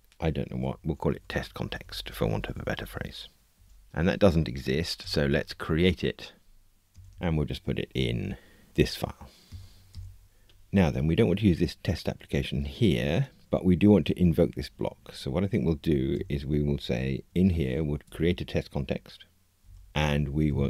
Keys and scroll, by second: 5.0 alt+Return, 18.0 Tab.